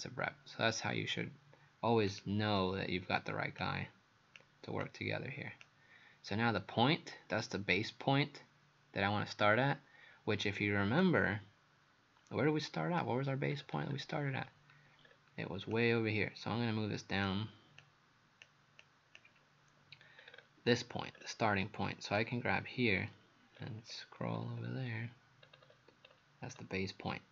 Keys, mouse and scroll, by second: 2.1 click, 13.5-14.7 scroll down 8, 15.1-15.4 scroll down 2, 15.7 click, 20.2-21.2 scroll up 3, 21.2-22.2 scroll up 3, 22.2 click, 23.6-24.8 scroll down 7, 25.5-26.6 scroll up 8.